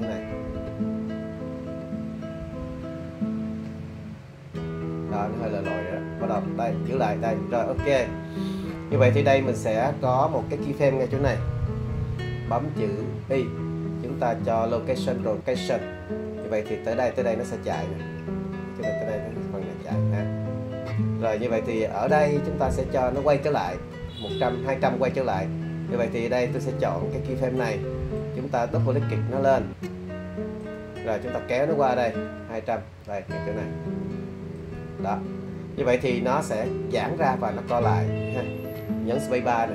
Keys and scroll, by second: 13.3 i.